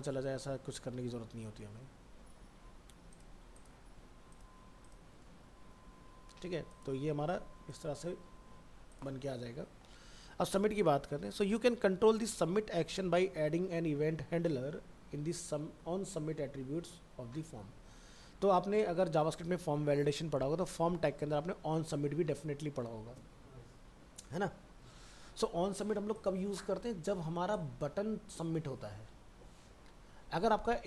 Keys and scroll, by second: 0.2 ctrl+a, 0.4 ctrl+v.